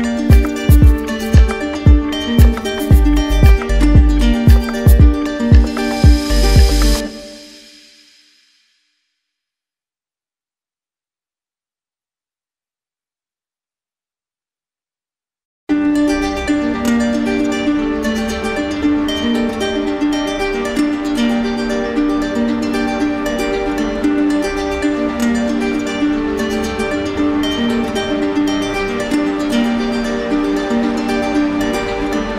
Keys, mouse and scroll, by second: 1.3 click, 1.8 click, 4.3 click, 4.9 click, 11.9 click, 15.1 click, 15.5 click, 15.8 click, 19.0 click, 19.7 click, 20.3-21.4 drag, 21.7-22.6 typing, 23.0 Return, 24.7 click, 25.2 shift+click, 26.2 click, 27.7 click, 28.6 alt+click, 29.1 click, 31.5 click.